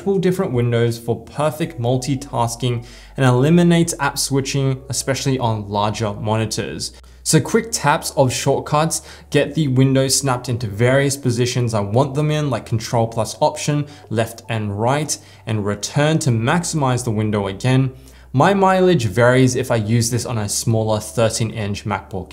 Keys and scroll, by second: 0.1 ctrl+alt+Right, 3.1 ctrl+alt+Return, 4.5 ctrl+alt+Up, 6.9 ctrl+alt+Down, 9.4 ctrl+alt+Left, 10.4 ctrl+alt+Right, 11.6 ctrl+alt+Down, 12.5 ctrl+alt+Right, 13.5 ctrl+alt+Return.